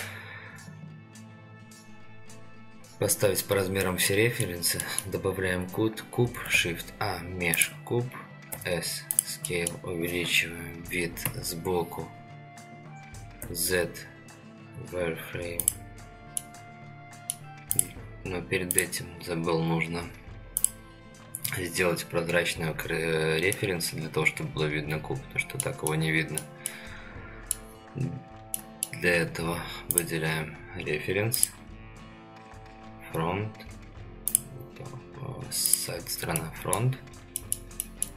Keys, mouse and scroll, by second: 4.1 middle click, 4.8 middle click, 6.2 shift+a, 8.5 s, 9.5 middle click, 11.2 KP_3, 12.7-13.4 scroll up 2, 13.4 z, 15.6 click, 16.4-17.3 middle drag, 17.7 click, 18.7 click, 20.6 click, 23.5-25.6 middle drag, 25.8-26.4 middle drag, 26.6-27.5 middle drag, 28.5 middle click, 29.9 click, 31.3 click, 34.3 click, 35.7 click, 36.4-36.8 middle drag, 37.4 middle click, 37.8 shift+middle drag.